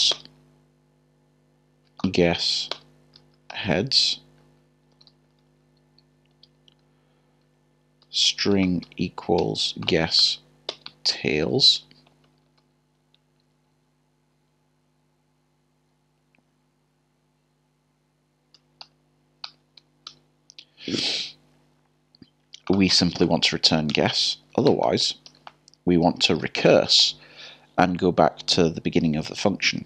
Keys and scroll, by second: 2.0 BackSpace, 4.4-4.9 typing, 6.0 typing, 8.0-9.4 typing, 14.3 typing, 19.4 %, 23.9 typing.